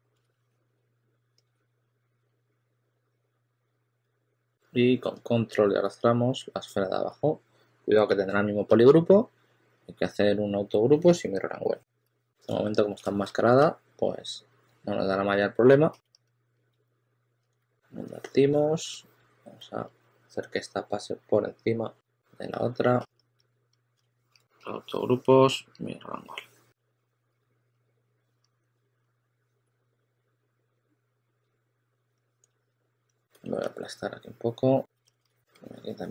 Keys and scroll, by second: 0.0-1.5 typing, 3.9 w, 8.1 w, 11.9 q, 13.9 2, 14.5 2, 16.6 s, 17.5 2, 19.4 2, 23.3 s, 24.2 super+a, 26.7 2, 33.2 5, 35.3 5.